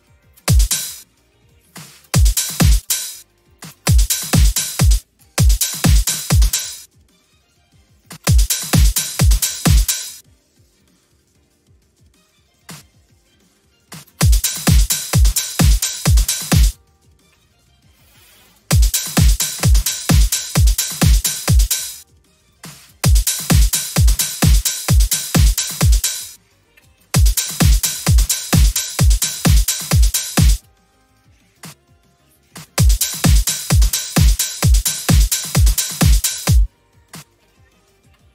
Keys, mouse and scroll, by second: 0.0 click, 0.3 space, 0.8 space, 1.6 click, 2.0 space, 2.8 space, 3.4 click, 3.7 space, 4.1 middle click, 4.7 space, 5.2 space, 5.9 click, 6.5 space, 7.9 click, 8.1 space, 8.7 middle click, 8.7-9.4 scroll up 2, 9.4 scroll up 1, 9.8 space, 10.5 middle click, 10.5 scroll up 2, 12.5 click, 13.7 click, 14.0 space, 15.7 middle click, 16.5 space, 18.0 right click, 18.5 space, 19.4 click, 21.2 middle click, 21.6 space, 22.4 click, 22.9 space, 24.0 click, 26.0 space, 26.2 middle click, 26.2 scroll, 27.0 space, 28.6-30.3 middle drag, 28.6-30.3 scroll up 2, 30.4 space, 31.5 click, 32.4 click, 32.6 space, 35.9 middle click, 35.9-36.2 scroll up 2, 36.3 space, 37.0 click.